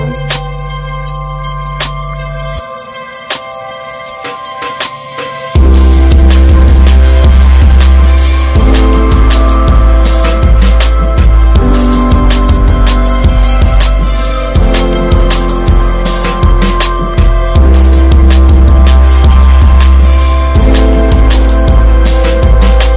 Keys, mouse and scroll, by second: 2.8 ctrl+s, 3.4-5.6 drag, 6.5 click, 6.8 middle click, 7.1 ctrl+s, 8.3 click, 8.6 ctrl+s, 9.4-16.2 drag, 18.9 scroll up 3, 19.2-21.3 middle drag, 21.3-22.6 drag.